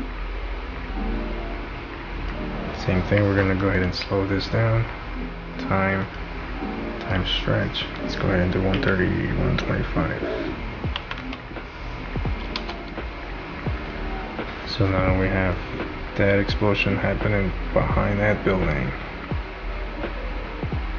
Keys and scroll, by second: 8.8 1, 11.0-11.7 typing, 12.9 Return.